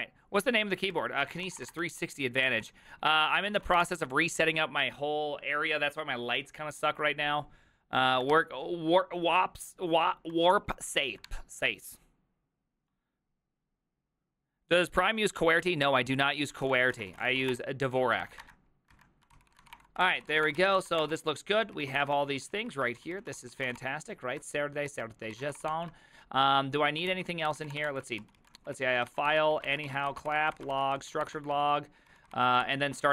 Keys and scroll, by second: 1.0 alt+{, 1.2-4.4 typing, 11.3 alt+{, 11.3 alt++, 17.1-24.2 typing, 19.0 alt+{, 19.4 ctrl+c, 20.3 ctrl+c, 20.6 Return, 20.6 ctrl+u, 20.8 ctrl+c, 24.6 Return, 24.9 ctrl+u, 25.4 ctrl+c, 25.6 Return, 25.7 ctrl+t, 27.1 ctrl+h, 27.3-33.1 typing, 28.2 ctrl+u.